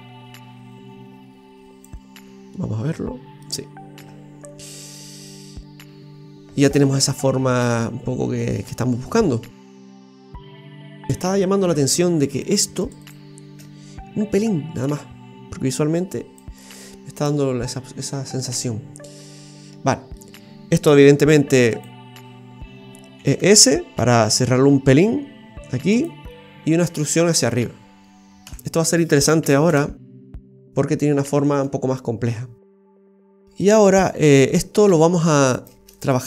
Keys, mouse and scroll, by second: 1.8 click, 2.2-2.5 scroll down 2, 2.5 middle click, 4.0 Tab, 4.7 middle click, 11.1 middle click, 11.1-11.5 scroll up 2, 11.7 Tab, 12.4 right click, 12.8 alt+shift+right click, 14.4 click, 16.6-17.7 scroll down 5, 18.4 shift+middle click, 19.9 shift+middle click, 21.0 shift+s, 22.2-23.0 scroll up 4, 23.1 e, 26.2-26.6 scroll down 6, 28.4 KP_3, 29.7 KP_0, 29.7 KP_1, 30.8 scroll up 3, 33.4 middle click, 34.4-35.5 scroll up 4, 35.5 right click, 35.5 scroll up 1, 35.9 alt+shift+right click, 36.1 alt+shift+right click.